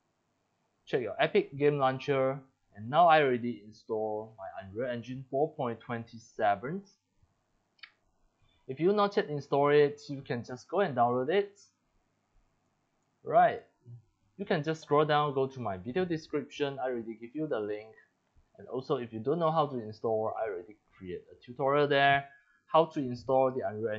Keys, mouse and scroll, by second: 1.8 click, 4.5-6.5 drag, 7.9 click, 9.4 click, 10.5 middle click, 10.5-10.8 scroll down 6, 11.4 middle click, 11.4 scroll down 5, 12.6 click, 13.4 BackSpace, 16.7 click, 21.0 click.